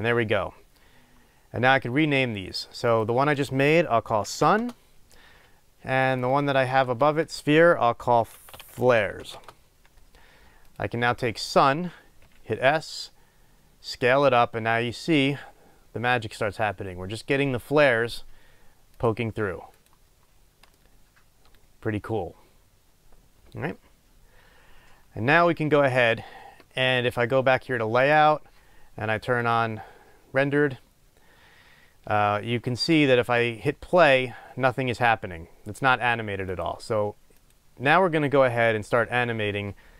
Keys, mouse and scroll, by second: 4.6 Return, 9.5 Return, 12.3 s, 19.2 click, 20.8-26.0 middle drag, 28.1 click, 31.4 scroll down 2, 31.9 scroll up 1, 34.2-36.7 drag, 37.5-39.9 drag.